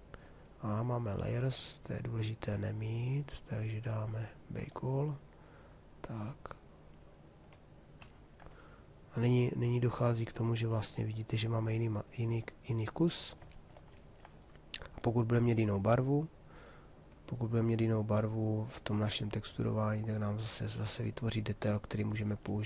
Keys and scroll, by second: 21.9 q.